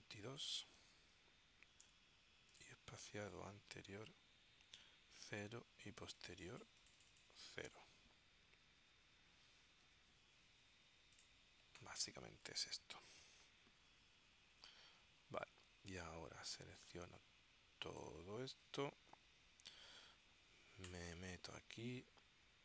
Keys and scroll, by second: 1.0 2, 2.2 Tab, 7.8 0, 9.9 Tab.